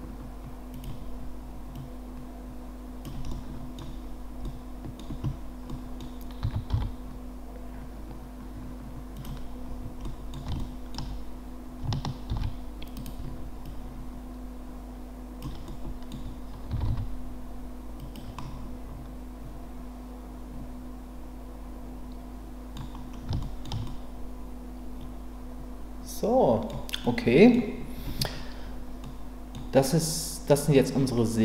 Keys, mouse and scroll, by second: 0.7 click, 1.7-3.0 drag, 3.3-3.8 middle drag, 4.4-5.0 middle drag, 5.7 scroll up 2, 6.0-6.4 scroll down 2, 6.4 s, 6.7 y, 9.1 click, 10.0-10.3 middle drag, 10.3 scroll down 1, 10.6-10.9 shift+middle drag, 12.3 shift+d, 13.0-13.6 right drag, 13.6-15.4 drag, 15.7-16.1 scroll up 1, 16.7 s, 16.9 x, 17.9 click, 18.3-22.7 middle drag, 23.4 shift+middle drag, 23.8-26.7 middle drag, 26.7-27.0 scroll down 1, 27.0-27.5 scroll up 1, 27.5 scroll down 1, 29.0-29.5 middle drag.